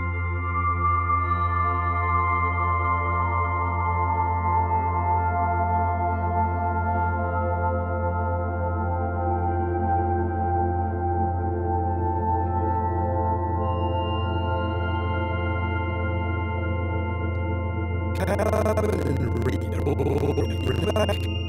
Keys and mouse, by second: 0.2-1.9 alt+shift+drag, 2.0 1, 2.9-6.6 alt+shift+drag, 8.2 ctrl+alt+click, 8.7 typing, 9.6 click, 10.7 alt+shift+click, 11.2 ctrl+alt+click, 12.5 alt+shift+click, 17.3-21.3 drag.